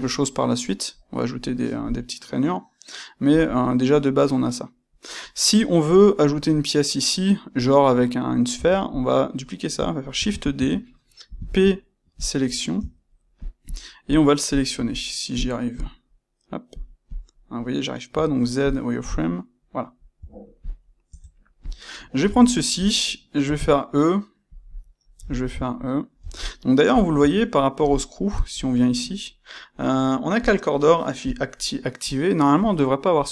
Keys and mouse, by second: 8.5 Tab, 8.8 click, 10.1 shift+d, 10.6 Escape, 11.3 p, 12.7 Tab, 13.6 click, 14.0 click, 14.4 click, 14.8 click, 15.3 click, 15.7 click, 16.6 click, 17.0 click, 18.0 z, 18.9 click, 20.1 z, 21.0 Tab, 21.5 click, 21.8-24.5 ctrl+middle drag, 23.4 e, 24.5 click, 24.7-27.0 middle drag, 26.1 e, 27.0 click, 27.1 Tab, 27.5-28.5 middle drag, 28.5 click, 30.4 click, 31.2 click.